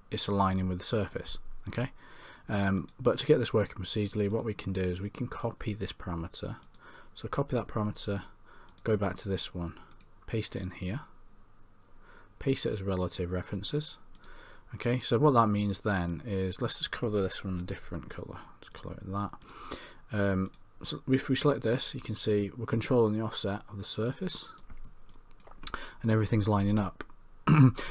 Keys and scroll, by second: 17.7 c.